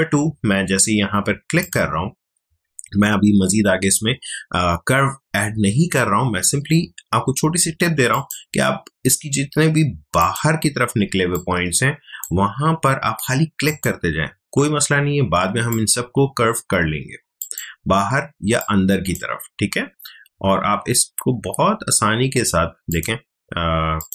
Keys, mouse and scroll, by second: 1.6 click, 8.1 click, 11.0 space, 11.3 click, 11.5 space, 13.6 click, 18.3 space, 18.6 click, 18.8 space, 19.6 alt+scroll up 1, 22.8 click.